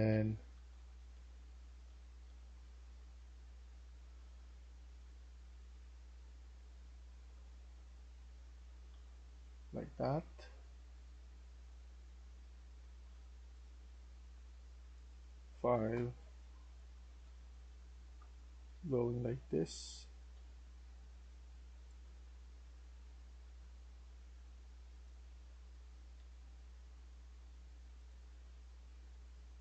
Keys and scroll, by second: 0.0-4.9 typing, 6.7 s, 7.7 s, 8.8 w, 11.1 s, 11.7 s, 15.4-22.9 typing, 25.2-26.1 typing.